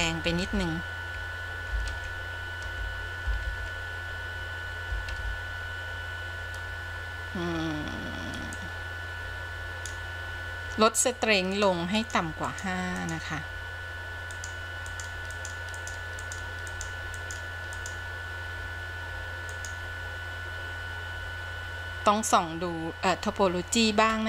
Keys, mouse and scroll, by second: 1.3 ctrl+z, 2.9 ctrl+z, 4.4 ctrl+z, 6.1 ctrl+z, 8.7-10.0 drag, 11.8 click, 12.3 click, 12.7 click, 13.3 click, 14.5 click, 15.2 click, 15.6 click, 16.0 click, 16.4 click, 17.0 click, 17.5 click, 18.0 click.